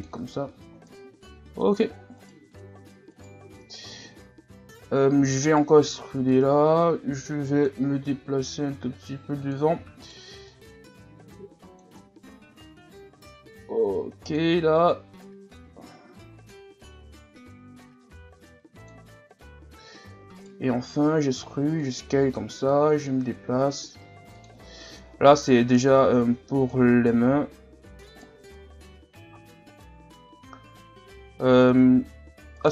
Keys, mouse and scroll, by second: 0.3 a, 0.8 scroll down 3, 1.5-2.1 scroll up 4, 2.2 alt+right click, 3.1 alt+right click, 3.9-4.7 scroll up 1, 5.2 e, 6.3-8.0 drag, 8.0 s, 9.8 e, 10.5-12.0 drag, 12.0-12.8 scroll down 1, 13.1 s, 14.9-17.6 drag, 17.6-18.0 scroll up 2, 18.0 s, 20.1 e, 20.9 s, 22.4-23.8 drag, 23.8 s, 25.1 e, 26.0-27.0 drag, 27.0 s, 29.0-30.1 scroll up 1, 30.1-31.3 scroll up 1, 31.3-32.0 scroll up 1, 32.6 right click.